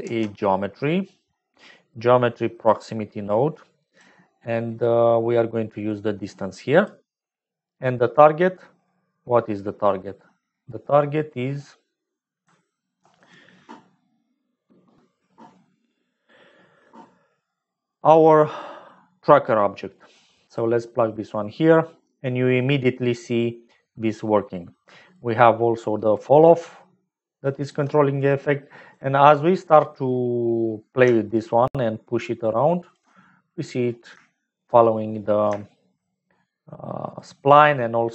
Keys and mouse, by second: 0.0 shift+a, 5.8-7.0 drag, 7.5 middle click, 9.1 click, 13.0 ctrl+s, 17.6 middle click, 19.2-20.7 drag, 22.5 middle click, 23.9 click, 25.2-27.7 shift+drag, 28.4 click, 29.4 click, 31.9 shift+click, 32.5 shift+middle click, 34.2 shift+middle click, 35.5 shift+middle click, 37.1-38.1 shift+drag.